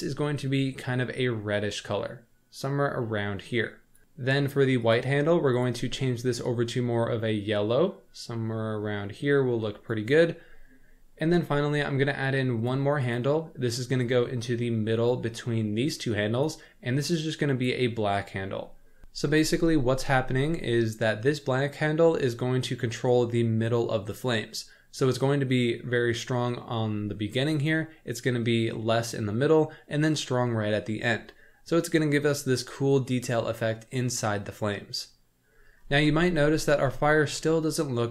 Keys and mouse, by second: 4.9 click, 5.5 click, 12.4 click, 13.0 click, 14.1-15.1 drag, 16.3 click, 37.1 shift+middle drag.